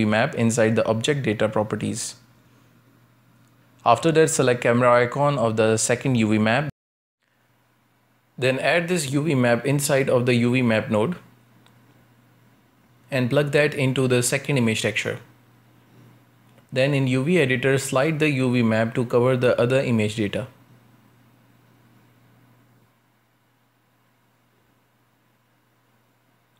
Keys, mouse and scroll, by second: 6.2-8.4 drag, 8.4-10.8 middle drag, 10.8-12.8 drag, 14.0 click, 14.8 Tab, 16.0 u, 17.6-18.1 scroll down 1, 18.1-21.8 shift+middle drag, 21.8-22.2 scroll up 1, 22.2 g, 23.3 shift+middle click, 23.6 scroll up 1, 23.9 g.